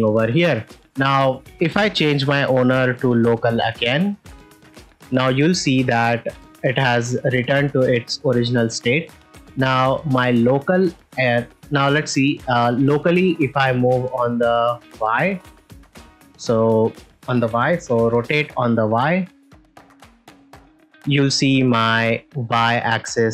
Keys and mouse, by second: 0.5 ctrl+middle drag, 0.9 ctrl+middle click, 1.2 shift+middle click, 2.7-3.7 drag, 4.6 ctrl+middle click, 5.0 middle click, 5.4 ctrl+middle click, 6.9-7.2 middle drag, 8.5 shift+middle drag, 8.9 ctrl+middle click, 9.9 middle drag, 10.8 shift+middle drag, 11.7 ctrl+middle drag, 14.5-15.8 drag, 15.9 middle click, 18.5 r, 18.5 y, 22.2 right click.